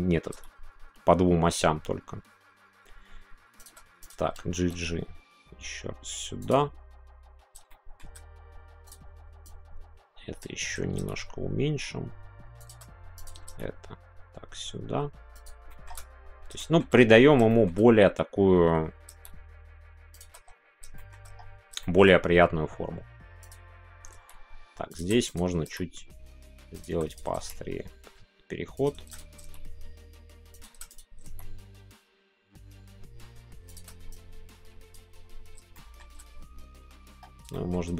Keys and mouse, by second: 3.5 shift+click, 4.0 click, 4.5 g, 6.4 click, 7.6-9.5 shift+middle drag, 9.5 click, 12.6 shift+click, 13.4 g, 15.3 click, 15.7 middle click, 16.6 shift+middle click, 17.5-19.1 shift+middle drag, 20.1 shift+click, 20.9 middle click, 21.8-23.4 middle drag, 23.4 click, 24.9 click, 25.2 click, 25.5 g, 26.7 click, 27.0 click, 27.4 shift+g, 28.7 click, 29.3 g, 30.5 click, 30.8 click, 31.1 g, 33.6 click, 34.1-35.3 drag, 35.7 shift+middle click, 37.5-37.9 shift+middle drag.